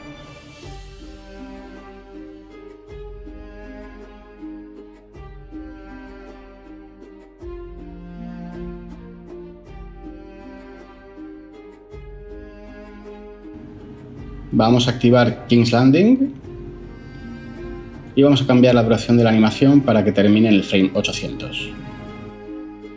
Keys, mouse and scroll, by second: 12.1 0, 20.0-20.5 typing.